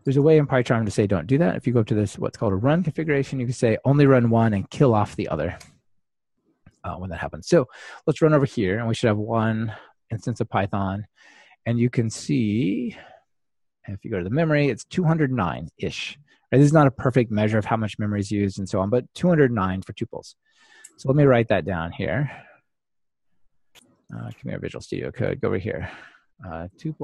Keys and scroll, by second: 7.9 ctrl+r.